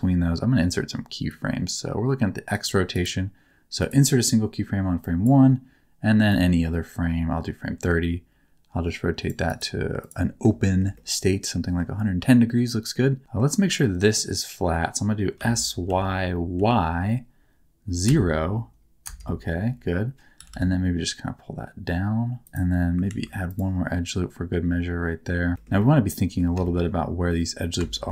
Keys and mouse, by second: 1.3-2.5 drag, 3.0 click, 5.0 click, 6.4-9.4 drag, 9.5 click, 10.6 shift+middle click, 10.9 middle click, 12.5 middle click, 13.2 middle click, 13.7 middle click, 15.4 s, 15.9 y, 16.5 y, 18.0 KP_0, 19.0 KP_Enter, 20.4 g, 20.5 g, 22.4 click, 23.2 ctrl+r, 25.8 middle click, 26.6 shift+middle click, 27.9 shift+middle click.